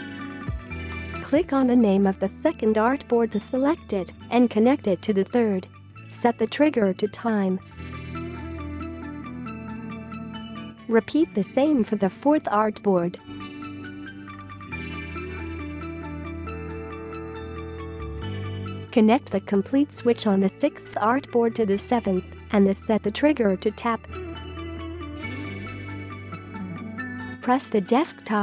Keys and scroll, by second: 0.1 space, 0.7 space, 1.3 space, 16.3-17.1 space, 26.4 space, 26.7 space.